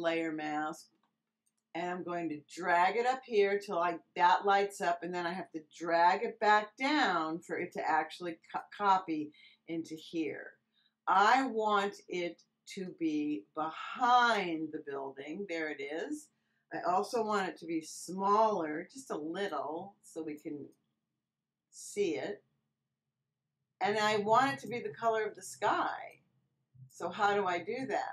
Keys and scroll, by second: 17.4 super+t.